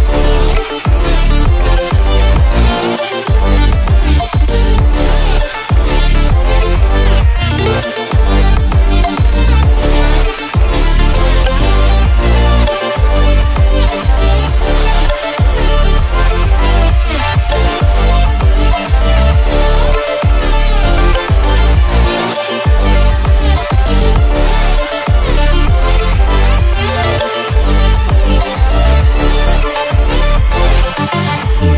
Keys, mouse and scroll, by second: 6.6-7.0 alt+shift+scroll up 1, 7.0 shift+click, 8.2 click, 9.0-10.6 drag, 10.6 click, 13.2 click, 24.0 shift+click, 29.2 a, 31.0 click.